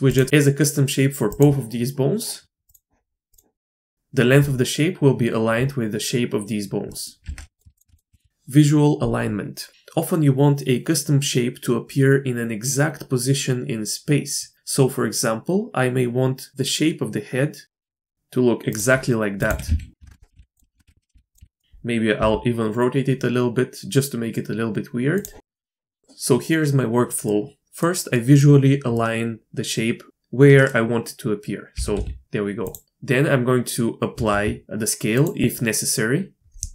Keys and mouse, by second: 1.3 click, 2.6 click, 3.6 click, 3.9 Tab, 6.9 click, 7.2 Tab, 7.5 click, 7.9 x, 8.1 shift+click, 17.8 middle click, 17.8 Tab, 17.9 shift+drag, 18.2 KP_3, 18.3 middle click, 18.7 click, 18.9 shift+click, 19.1 shift+click, 19.4-22.1 typing, 19.9 ctrl+click, 20.7 KP_Enter, 20.9 ctrl+z, 25.4 drag, 25.6-26.0 drag, 27.3 middle click, 28.2 middle click, 28.9-30.7 middle drag, 31.7 g, 34.1 ctrl+a.